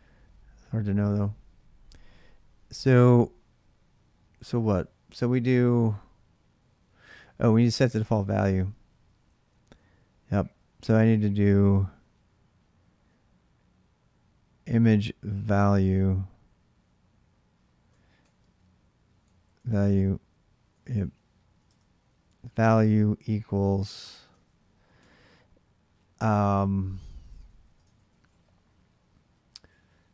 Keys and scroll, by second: 2.3-4.1 typing, 7.0-11.6 typing, 12.8 j, 14.1 j, 17.1-24.7 typing, 21.4 Return, 26.3-28.4 typing, 29.8-30.1 typing.